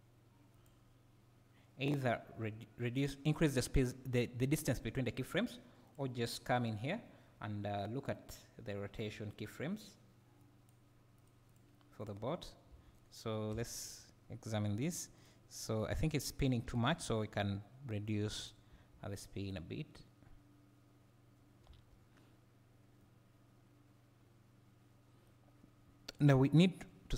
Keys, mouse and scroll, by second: 0.6-6.0 drag, 9.0-11.3 drag, 11.5 click, 12.0 click, 15.2 click, 16.7 g, 18.5 click, 18.7 space, 21.7 Escape, 23.0-26.1 right drag, 26.1 click, 26.5 click.